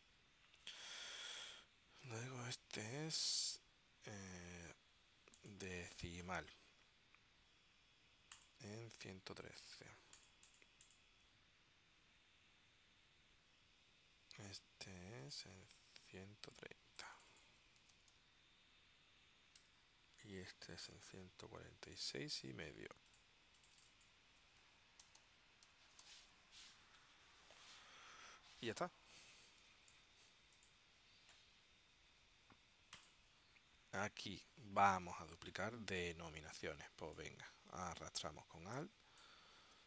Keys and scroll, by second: 17.7-18.7 typing, 19.7 Tab, 24.5-26.7 typing.